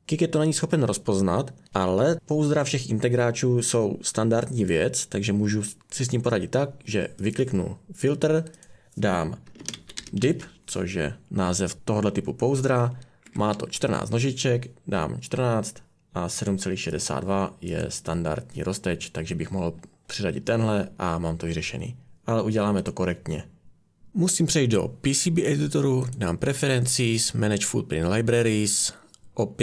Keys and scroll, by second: 9.4-10.7 typing, 13.2-14.2 typing.